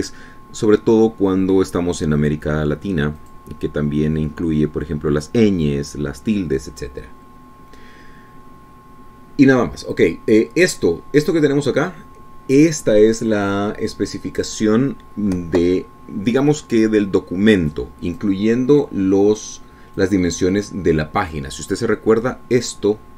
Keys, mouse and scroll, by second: 3.4 click, 4.4 click, 12.4-15.9 drag, 16.6 Home, 18.9 click, 21.2-22.7 drag.